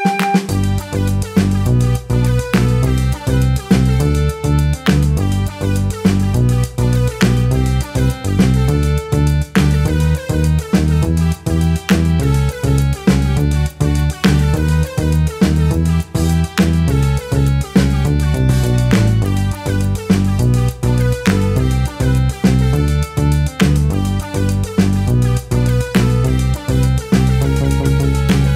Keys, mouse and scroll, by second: 0.0 middle click, 0.8 shift+click, 1.5 middle click, 1.7 shift+click, 1.8 middle click, 2.0 scroll down 2, 2.0 shift+middle click, 2.5 alt+shift+click, 2.6 scroll down 1, 2.7 shift+middle click, 2.8 scroll up 2, 3.1 scroll down 1, 3.1 middle click, 3.3 shift+click, 3.4 middle click, 3.5 shift+click, 3.6 shift+middle click, 4.0-4.7 scroll up 2, 4.1 shift+middle click, 5.0 shift+click, 5.1 middle click, 5.5 scroll up 1, 5.7 shift+click, 6.0 shift+click, 6.1 scroll down 1, 6.1 middle click, 7.0 scroll up 1, 7.1 alt+shift+click, 7.3 scroll down 4, 7.3 middle click, 7.5-7.9 scroll up 3, 7.6 middle click, 7.9 alt+shift+click, 8.0 scroll down 1, 8.1 shift+middle click, 8.4 alt+shift+click, 8.6 alt+shift+click, 8.7 middle click, 9.2 middle click, 9.7 scroll up 1, 9.8 alt+shift+click, 9.8 middle click, 9.9 ctrl+e, 10.8 scroll down 1, 10.8 shift+middle click, 11.3 click, 11.3 middle click, 11.4-11.8 scroll down 3, 12.0 Tab, 12.1 middle click, 12.8 middle click, 12.9 scroll up 3, 13.1 shift+click, 13.3 middle click, 13.4 shift+click, 13.5 shift+click, 13.6 middle click, 13.9 shift+click, 13.9 middle click, 14.0 ctrl+e, 14.3 a, 14.3 shift+middle click, 14.6-14.9 scroll up 2, 15.1 shift+click, 15.3 shift+middle click, 15.3 scroll up 1, 15.8 click, 16.3 shift+middle click, 16.7 a, 16.8 middle click, 16.9 scroll down 1, 17.2 scroll up 2, 17.3 shift+middle click, 17.5 ctrl+e, 17.6 click, 17.7 ctrl+e, 17.8 scroll down 1, 17.9 shift+middle click, 18.0 scroll up 1, 18.3 click, 18.6 middle click, 19.4-20.6 typing, 19.7 Tab, 19.9 shift+middle click, 20.0 scroll up 3, 20.6 shift+click, 21.9 scroll down 1, 22.1 click, 22.9 click, 24.4 Tab, 25.1 Tab, 25.2 shift+middle click, 25.6 Tab, 25.6 shift+middle click, 25.7 Tab, 25.8 shift+middle click, 25.9 scroll up 2, 26.0 Tab, 26.1 shift+middle click, 26.1 Tab, 26.2 shift+middle click, 26.5-28.5 typing, 27.5 shift+middle click, 27.7 shift+middle click, 27.9 scroll up 4, 28.0 shift+middle click.